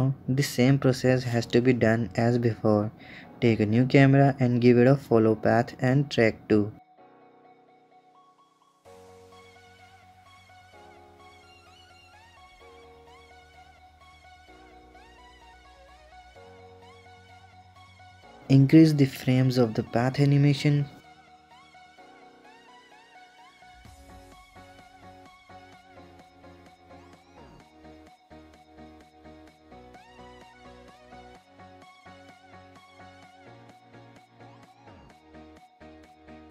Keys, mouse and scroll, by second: 0.4 shift+a, 3.0 alt+g, 3.1 alt+r, 3.8 click, 4.1-6.3 drag, 6.4 click, 6.5 click, 7.7 shift+a, 8.6 click, 9.5 KP_1, 9.9 click, 10.5-11.6 middle drag, 11.6 click, 11.8 scroll down 2, 11.9-12.3 middle drag, 12.3 scroll up 1, 12.8-13.8 drag, 14.0 click, 15.1 click, 15.4 s, 15.8 KP_0, 16.1 KP_0, 16.8 click, 17.4 KP_0, 17.5 middle drag, 17.7 click, 18.3 click, 18.8-19.6 scroll down 9, 19.6-21.8 drag, 23.8 KP_0, 26.1-27.6 drag, 28.0-28.6 drag, 29.1 click, 30.3 click, 31.5-32.5 drag, 33.6 click, 34.3 click, 35.1-36.5 drag.